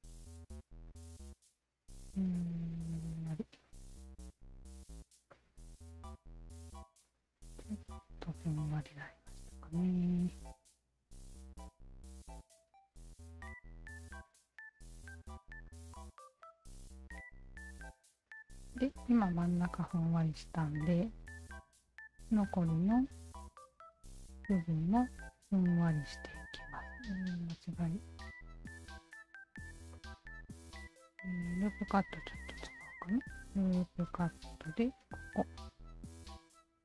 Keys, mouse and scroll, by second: 0.1-3.2 alt+shift+drag, 3.6-4.9 alt+drag, 5.3 alt+click, 5.8 alt+right click, 6.6-8.8 alt+drag, 9.4 alt+click, 10.9 w, 11.6-12.9 alt+shift+drag, 13.2 alt+click, 13.7-15.4 alt+drag, 15.7-18.7 alt+drag, 19.1 alt+middle click, 19.4 alt+right click, 19.9-21.7 alt+drag, 22.2 alt+click, 22.7-23.8 alt+drag, 25.0 shift+click, 26.2 shift+click, 27.4 ctrl+z, 27.9-28.9 shift+drag, 29.1 shift+click, 29.9-31.5 shift+drag, 32.6 shift+q, 33.7 alt+click, 35.1 alt+click.